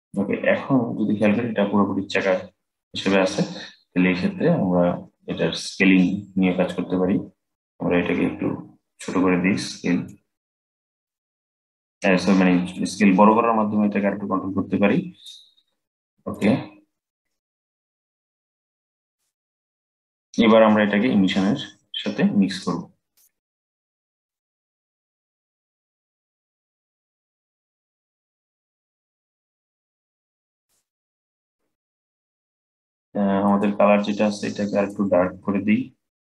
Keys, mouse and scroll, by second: 6.4-9.4 drag, 10.7-16.0 drag, 17.0-19.7 drag, 19.7-23.9 middle drag, 23.9-27.0 drag, 31.0-33.2 middle drag, 33.2 click.